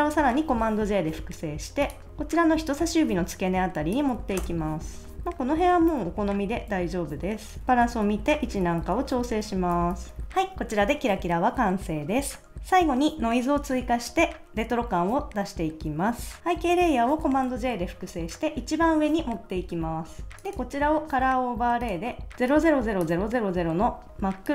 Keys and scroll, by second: 0.5 super+j, 4.4 Return, 5.1 shift+Up, 5.6 shift+Down, 6.0 Right, 6.3 Down, 6.7 Left, 7.6 Up, 7.9 Down, 8.5 Left, 8.9 Up, 9.1 Right, 9.4 Down, 9.7 Left, 10.2 Up, 17.4 super+j.